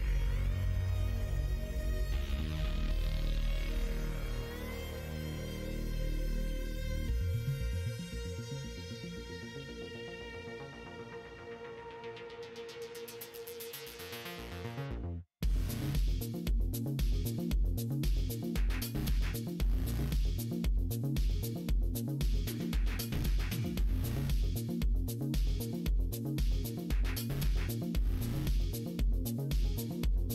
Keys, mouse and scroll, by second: 1.9 middle click, 3.2 k, 6.6 middle click, 7.5 middle click, 8.9 k, 12.1 click, 12.7 middle click, 13.7 middle click, 14.0 shift+middle click, 14.5 middle click, 15.3 shift+middle click, 18.8 middle click, 20.0 middle click, 20.4 middle click, 20.8 shift+middle click, 21.2 middle click, 21.7 middle click, 24.0 middle click, 24.7 1, 25.1 click, 25.5 middle click, 27.1-28.5 drag, 28.7 middle click, 29.7 middle click.